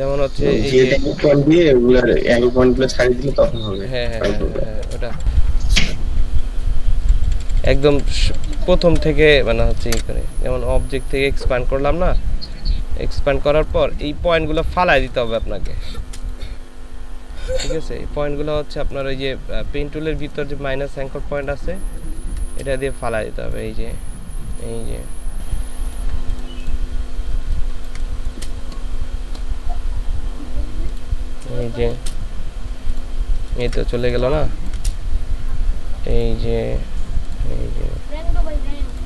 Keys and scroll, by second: 0.2 ctrl+space, 3.8-5.4 typing, 7.3-8.5 typing, 9.5 z, 9.9 c, 14.2 ctrl+space, 15.4 ctrl+space, 22.0 ctrl+space, 27.4 ctrl+space, 31.5 space, 33.4 ctrl+space.